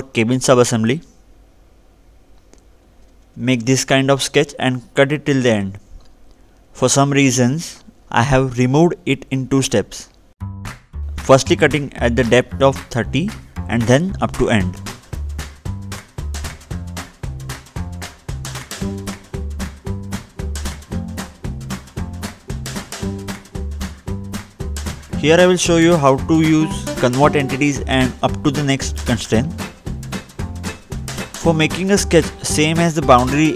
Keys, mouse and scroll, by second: 1.5 scroll down 2, 2.0 click, 3.6-4.1 scroll up 1, 4.1-4.7 scroll down 2, 6.1-6.8 scroll up 1, 6.8 scroll up 1, 6.9 middle click, 7.5 scroll down 2, 8.2 middle click, 8.7-9.1 scroll up 1, 9.1-9.8 scroll down 2, 9.8 middle click, 12.6 click, 14.2 click, 14.3 middle click, 15.3-16.6 scroll down 2, 21.5 click, 24.7 click, 25.0-26.1 scroll down 2, 26.4 ctrl+8, 27.1-29.5 scroll down 2, 29.5 click, 31.6 click.